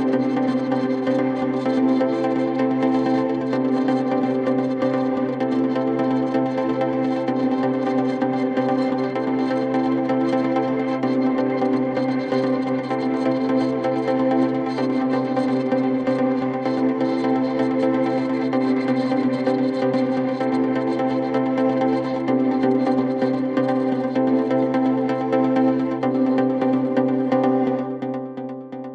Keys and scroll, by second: 10.2 shift+F2, 10.8 Escape, 20.6 F9, 25.7 F9.